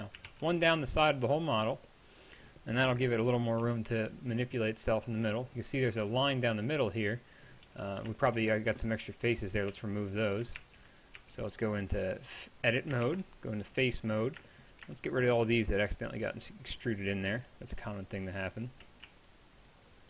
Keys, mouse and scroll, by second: 0.3 ctrl+r, 2.9 KP_1, 3.6 z, 7.7 Tab, 9.7 z, 10.6 ctrl+Tab, 11.2 Tab, 13.1 ctrl+Tab.